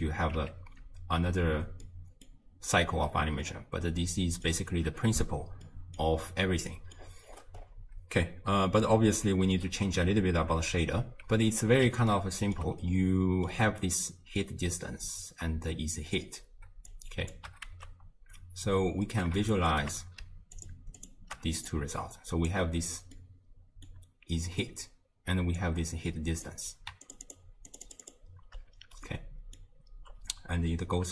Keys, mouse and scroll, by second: 0.4 x, 1.8 middle click, 2.5-3.9 scroll down 20, 3.9-7.0 middle drag, 7.0-8.2 scroll up 9, 8.2-8.7 scroll down 3, 8.9-15.9 middle drag, 16.2 scroll down 2, 16.9 click, 17.7 ctrl+x, 19.1-19.5 middle drag, 19.5 shift+right click, 20.6 ctrl+shift+click, 21.0 ctrl+shift+click, 21.7 click, 23.2-25.6 middle drag, 25.6 click, 27.1 ctrl+shift+click, 27.3 ctrl+shift+click, 27.7 ctrl+shift+click, 27.9 ctrl+shift+click, 28.1 ctrl+shift+click, 29.1-31.1 middle drag.